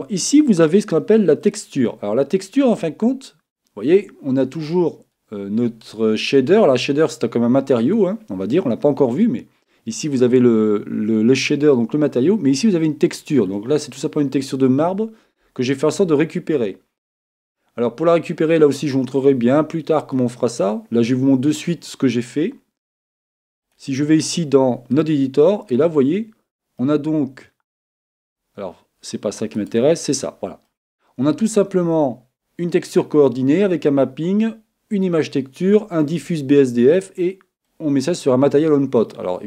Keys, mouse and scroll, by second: 2.4-4.9 middle drag, 20.0-21.8 drag, 23.7-25.5 drag, 25.7-29.7 middle drag, 29.7-31.3 right drag, 31.1-38.0 middle drag, 39.2-39.4 middle drag.